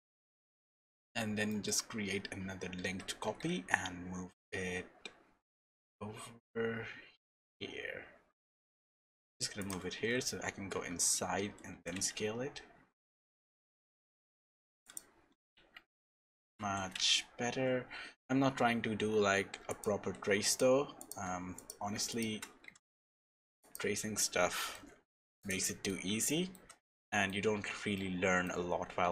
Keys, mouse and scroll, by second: 0.3-0.8 scroll up 2, 1.0 shift+middle click, 2.8 alt+d, 10.0 Tab, 10.7 a, 11.7 s, 15.6 Tab, 16.2 g, 20.5 shift+click, 21.5 click, 22.1 shift+click, 22.6 g, 23.9-24.5 scroll down 4, 24.5 middle click, 24.8 scroll down 1, 25.1 shift+middle click, 25.4 click, 25.6 middle click, 26.3 shift+middle click, 26.9 middle click, 27.5-27.9 scroll up 5, 27.9 shift+middle click, 28.7 scroll down 1.